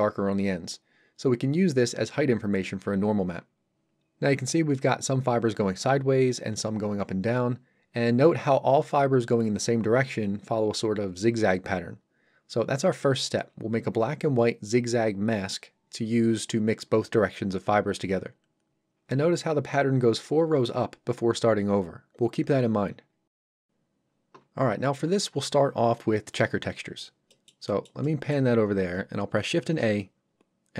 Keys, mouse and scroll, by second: 19.0 3, 19.0 2, 23.7 2, 26.9-27.3 scroll down 1, 27.3 middle click, 29.6 shift+a.